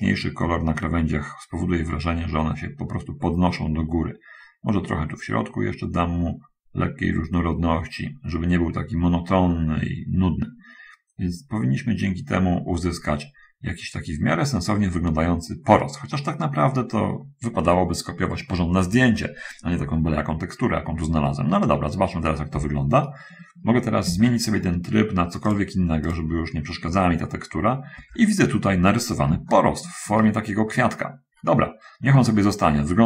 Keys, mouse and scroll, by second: 3.9-13.2 drag, 21.8-22.4 scroll up 1, 22.6-23.2 scroll up 1, 24.3-25.0 scroll up 1, 25.4 click, 26.3 click, 28.0-28.4 scroll up 1, 29.8 shift+middle click, 31.4-33.0 middle drag.